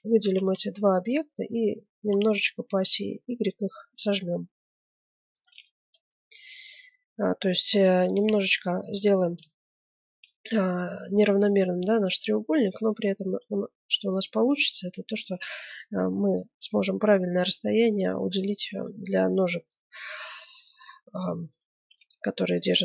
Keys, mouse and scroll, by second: 1.1-2.7 middle drag, 1.7 s, 5.7-12.5 middle drag, 12.5-14.3 drag, 15.6-17.8 middle drag, 18.4-19.7 right drag, 19.7 middle click, 20.1-21.4 drag, 21.9-22.8 middle drag.